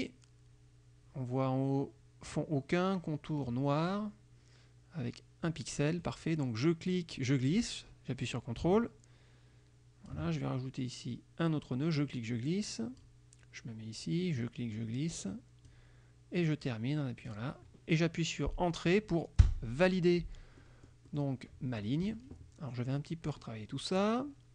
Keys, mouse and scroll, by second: 7.0-10.4 drag, 12.1-13.3 drag, 14.5-16.0 drag, 17.3 click, 19.5 Return, 20.7 click, 21.8 click, 23.3 F2.